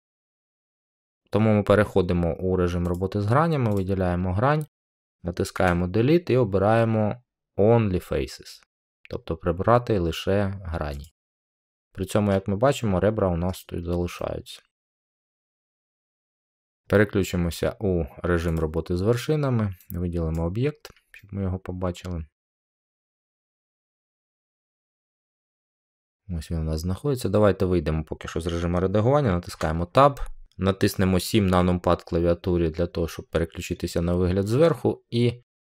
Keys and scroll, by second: 5.5 Delete, 29.4 Tab, 31.4 7.